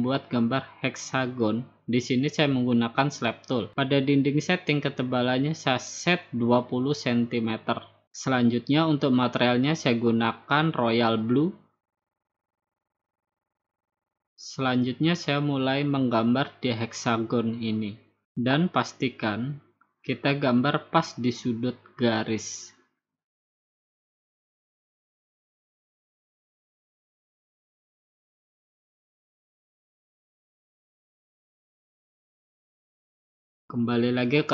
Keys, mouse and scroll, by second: 0.6 click, 2.2 click, 4.6 click, 5.2 click, 6.0 typing, 7.9 click, 8.9 click, 9.5-10.5 drag, 10.8-11.8 drag, 12.6 middle click, 12.7 middle click, 12.7 middle click, 13.1 middle click, 13.3 middle click, 15.2 click, 18.4-20.5 drag, 20.9-22.0 drag, 23.1-24.2 drag, 25.7-26.8 drag, 27.1 BackSpace, 29.8-30.9 drag, 32.2 click, 34.4 click.